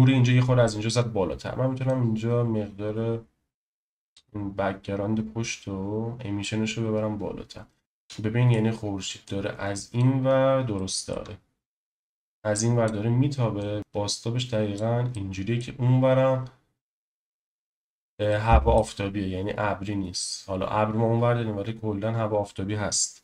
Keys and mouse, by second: 2.0-4.7 drag, 4.7 middle click, 8.0-8.5 middle drag, 9.2 click, 10.7-11.1 shift+middle drag, 12.1 click, 13.6 click, 13.8 click, 15.1 middle click, 18.3 middle click.